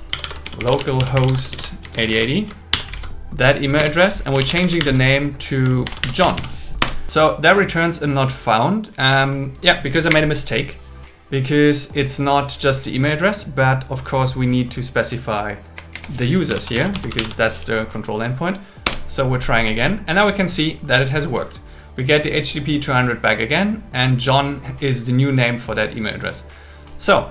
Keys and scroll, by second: 0.1 shift+7, 1.5 shift+., 2.7 shift+7, 2.9 super+v, 3.8 space, 4.8 shift+0, 5.9 shift+j, 6.8 Return, 10.1 Up, 10.3 Left, 14.1 Left, 14.6 Left, 17.3 shift+7, 18.9 Return.